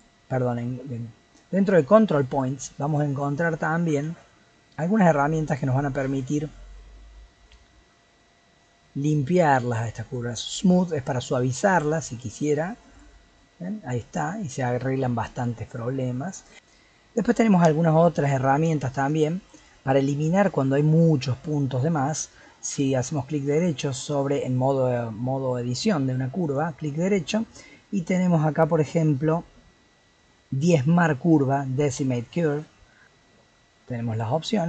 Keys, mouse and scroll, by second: 15.7 middle click, 18.3-22.2 middle drag, 22.6-25.6 right drag, 26.4-29.6 right drag, 34.1-34.6 drag.